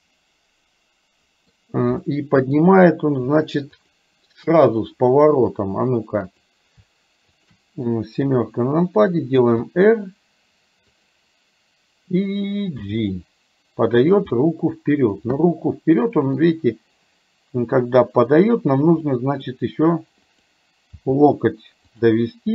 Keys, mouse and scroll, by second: 2.1 middle click, 3.8 shift+click, 5.1 middle click, 6.4 click, 8.2 KP_7, 9.7 r, 12.8 g, 14.4 middle click, 15.4-16.4 middle drag, 19.2-19.6 scroll up 1, 21.1 g.